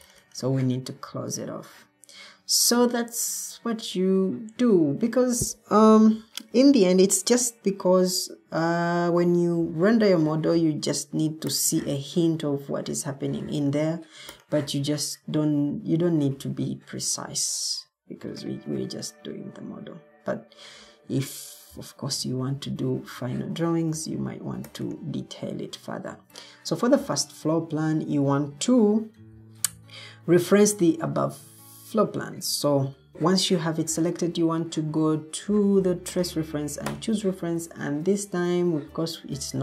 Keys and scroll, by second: 33.1 Escape.